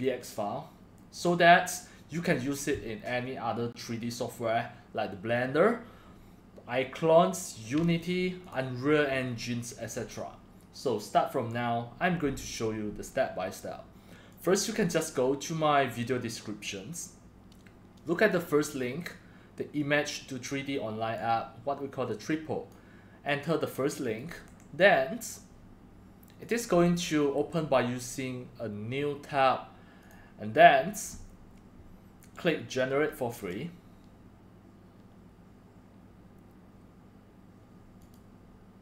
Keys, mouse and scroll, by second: 1.1-6.4 drag, 8.4-8.9 drag, 13.1-13.6 drag, 14.4 click, 14.9-18.3 drag, 20.0-21.1 drag, 22.1 click, 23.3 click, 24.4 click, 24.4 ctrl+c, 25.3-26.0 drag, 26.4 click, 26.9 ctrl+v, 27.4 Return, 30.0 click, 33.4 click, 38.0 click.